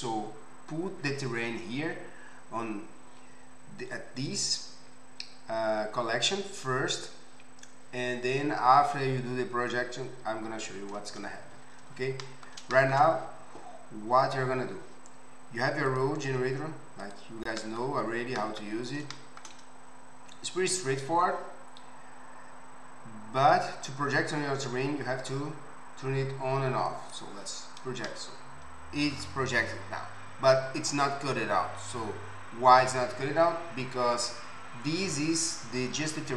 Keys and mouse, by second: 16.0-17.0 middle drag, 17.0 click, 17.2-26.9 middle drag, 26.9-36.3 drag.